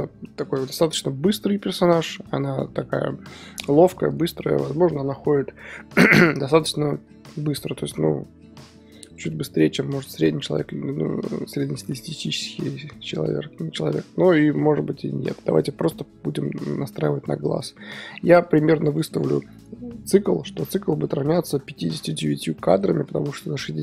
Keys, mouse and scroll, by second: 15.7-23.8 drag, 15.7 KP_1, 22.5-23.0 middle drag, 23.0-23.8 scroll up 3.